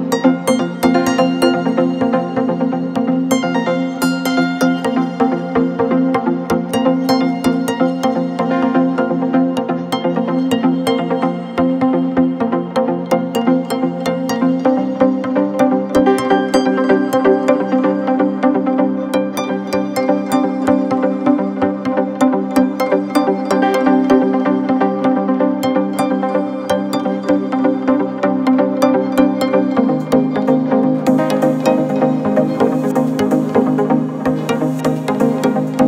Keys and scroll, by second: 11.2 ctrl+t, 20.6 ctrl+t, 26.7 alt+shift+Return.